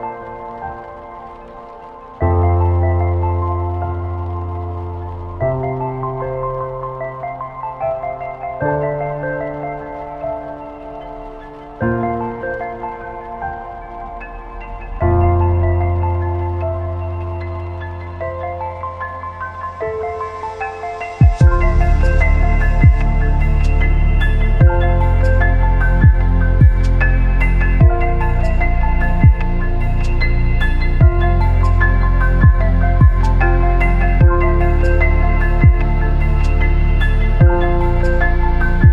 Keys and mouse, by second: 0.8 Tab, 0.8 typing, 1.2-1.9 middle drag, 2.4 middle drag, 2.9 space, 5.5 space, 6.1-6.4 shift+middle drag, 7.8 shift+a, 14.1 click, 15.2-16.1 drag, 19.3 click, 20.3 drag, 20.9 click, 21.7 click, 28.2 click, 30.3 click, 30.4 typing, 31.7 click, 34.5 click, 34.6 typing, 36.2-37.3 drag.